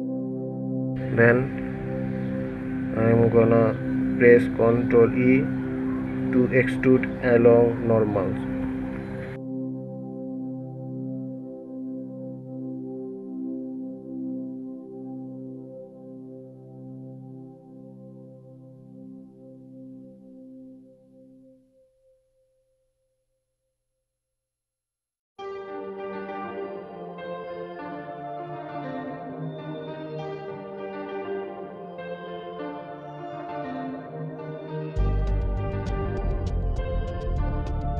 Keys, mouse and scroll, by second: 0.6 ctrl+z, 3.0 alt+e, 12.4 s, 22.5-23.7 middle drag, 23.7 KP_1, 26.4-26.8 scroll down 1, 26.8 scroll up 2, 28.7-29.1 scroll down 1, 29.4-29.9 scroll up 2, 31.4-33.1 middle drag, 33.1 KP_1.